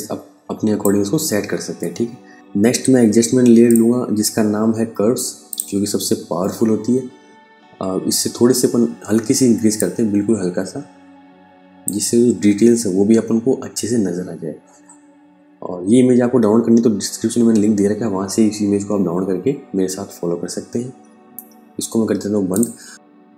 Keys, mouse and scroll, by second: 3.1 click, 9.2 click, 21.9 click, 22.9 space.